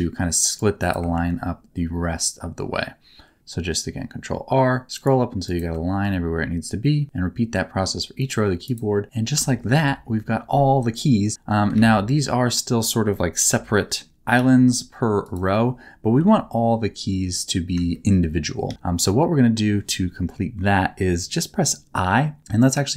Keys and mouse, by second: 0.8 right click, 1.1 ctrl+r, 5.4 right click, 5.9 ctrl+r, 8.6 right click, 9.4 shift+middle click, 9.7 a, 11.3 middle click, 11.7 alt+a, 13.4 l, 13.8 middle click, 14.3 g, 15.2 click, 16.1 KP_7, 17.9 shift+middle click, 18.6 a.